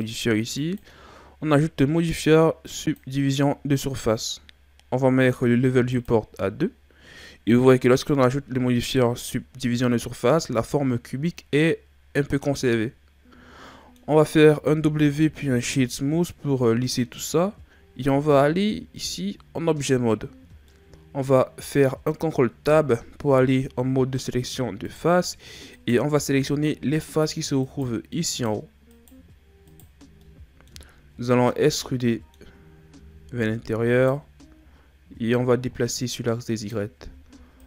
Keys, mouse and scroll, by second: 0.0 click, 5.9-10.9 drag, 12.4-14.3 middle drag, 14.3-14.8 scroll up 1, 14.8 w, 18.1 Tab, 20.7 middle click, 21.6-22.7 scroll up 1, 22.7 ctrl+Tab, 25.7 right click, 27.0 shift+right click, 27.6 shift+right click, 28.3 shift+right click, 28.9 shift+right click, 29.6 shift+right click, 30.2 middle click, 30.9-31.5 scroll down 1, 31.5-33.0 middle drag, 33.0 e, 35.3 click, 37.1 e.